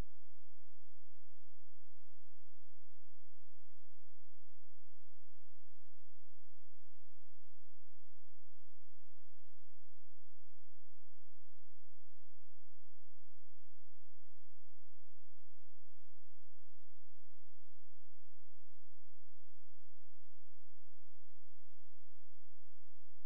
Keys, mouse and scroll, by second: 1.4 z, 3.4 click, 6.2 space, 9.0 click, 10.7 ctrl+click, 12.4 space, 12.5 click, 17.1 click, 18.5 shift+l, 19.4 super+space, 20.0 click.